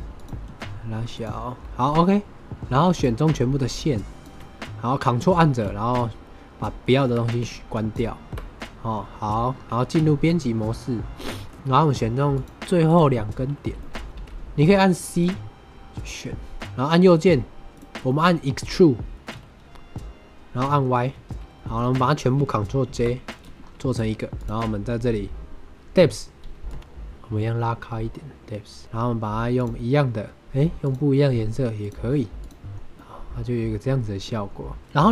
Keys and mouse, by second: 0.1 click, 0.4 s, 1.0 click, 1.9 shift+click, 2.8 shift+click, 3.6 shift+click, 5.6-6.5 ctrl+drag, 7.7 ctrl+drag, 9.8 Tab, 10.5 middle click, 12.2 click, 12.8 click, 13.7 middle click, 14.1 c, 17.7 click, 18.0 click, 18.0 middle click, 19.2 e, 21.0 y, 21.5 Tab, 21.5 middle click, 22.8 ctrl+j, 23.2 middle click, 26.7-28.8 shift+drag, 29.5 click, 30.3 click, 31.7 click, 32.3 click, 32.9-34.1 middle drag, 35.0 shift+middle drag.